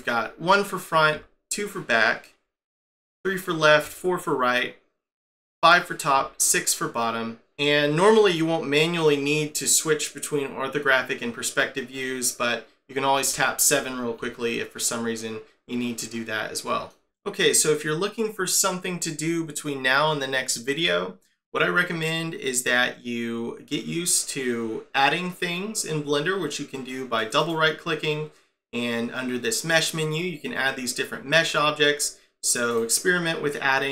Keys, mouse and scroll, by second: 1.1 2, 2.9 3, 3.8 4, 5.4 5, 6.1 6, 13.3 7, 13.7 7, 14.8 middle click, 27.2 right click, 27.4 right click, 31.4 middle click, 32.5 right click, 32.8 right click.